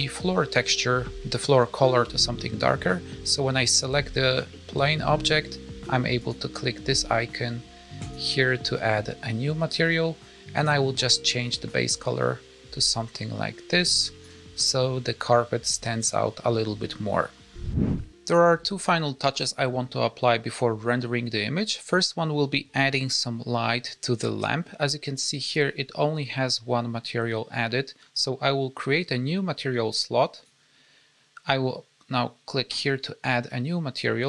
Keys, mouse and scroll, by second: 21.5 scroll up 1, 24.3 middle click, 30.3 click, 32.6 click.